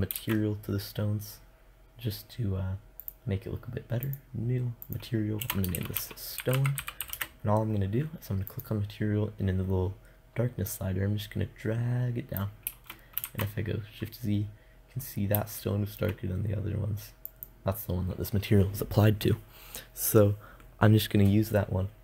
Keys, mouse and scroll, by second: 2.5-6.8 drag, 8.0-11.0 drag, 12.7 shift+z, 16.8-18.7 drag.